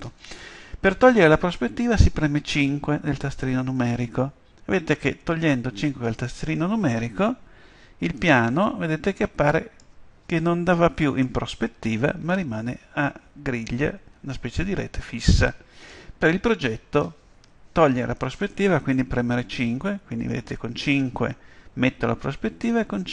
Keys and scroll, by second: 3.8 5, 19.5 KP_5, 22.7 KP_5.